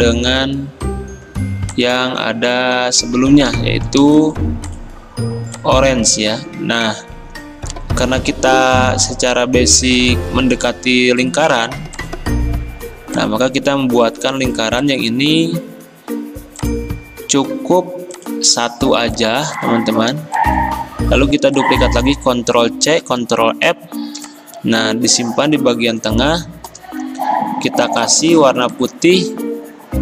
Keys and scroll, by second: 0.0-0.3 typing, 22.9 ctrl+c, 23.2 ctrl+f, 27.0 d, 29.8 d.